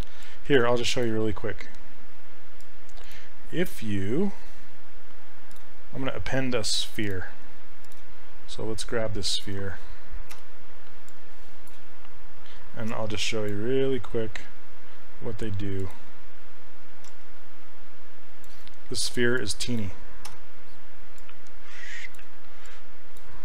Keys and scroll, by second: 0.6 [, 10.4 f, 12.9 s, 17.1 s, 20.3 e.